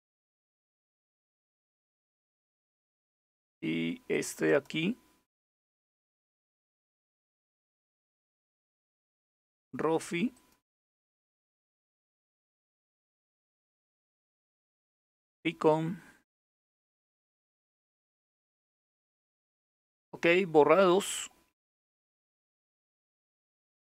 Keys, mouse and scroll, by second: 0.3 click, 1.2-3.3 scroll down 2, 3.3-3.8 scroll down 1, 3.8 click, 4.1 right click, 5.4 click, 6.6 click, 7.5-8.7 scroll down 2, 8.7 scroll down 1, 8.8-10.0 scroll up 2, 10.0 click, 11.8-13.3 right drag, 13.3 click, 14.4 click, 14.8 right click, 16.9 click, 18.0 click, 20.4-23.9 scroll up 1.